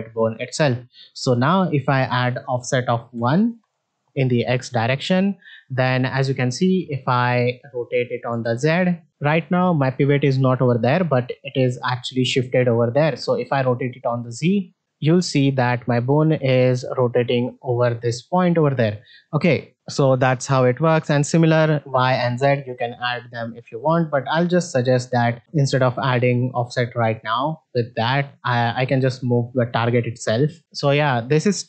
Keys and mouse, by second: 1.5-3.6 drag, 4.5 middle drag, 5.1-5.5 middle drag, 6.0 middle click, 8.2 r, 13.0 r, 24.7-26.2 drag, 30.6 middle click.